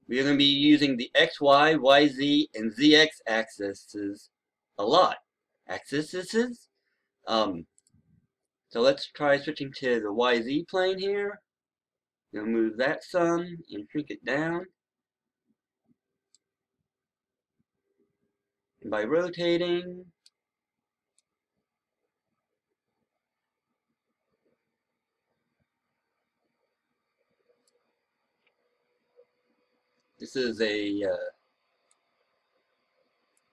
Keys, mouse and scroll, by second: 13.6-14.7 scroll down 1, 16.2-20.6 right drag, 21.0-27.6 drag, 27.9-33.5 drag.